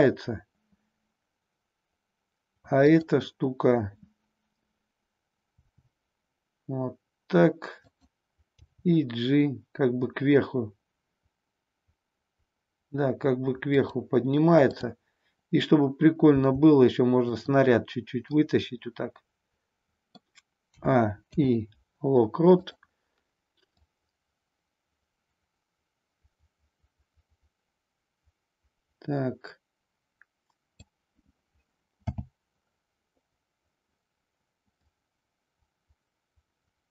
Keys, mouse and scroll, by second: 5.5 r, 7.9 click, 8.4 g, 13.8 click, 14.7-15.8 drag, 16.3 g, 17.3 click, 18.3-20.4 middle drag, 20.6 a, 21.2 i, 23.6-30.8 drag, 32.0 n, 34.8-36.9 drag.